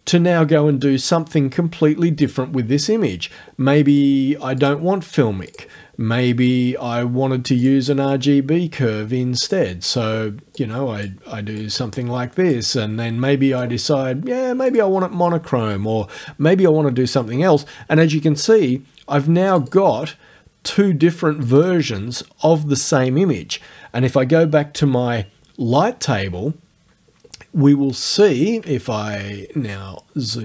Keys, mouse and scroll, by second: 2.3 click, 3.9 click, 4.6 click, 5.5 click, 7.6 click, 9.5 click, 10.6 click, 11.6 click, 13.6 click, 14.7 click, 18.4 click, 19.6 click, 21.5 click, 24.8 l, 29.7-30.2 ctrl+scroll up 2, 30.3 ctrl+scroll up 2.